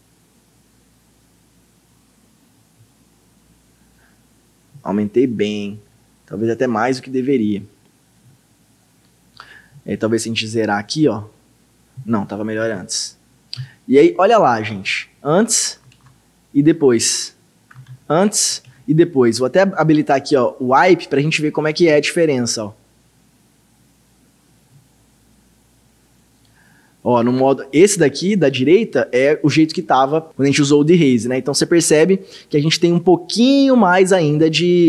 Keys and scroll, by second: 12.7 ctrl+z, 14.7 ctrl+d, 15.9 ctrl+d, 17.9 ctrl+d, 18.7 ctrl+d.